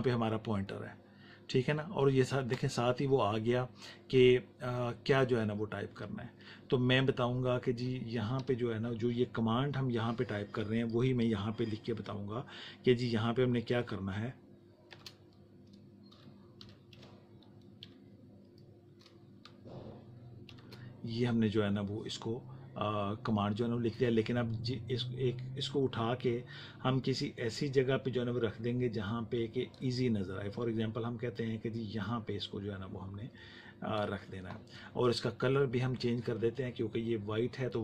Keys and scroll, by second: 15.2-17.8 typing, 20.4 shift+5.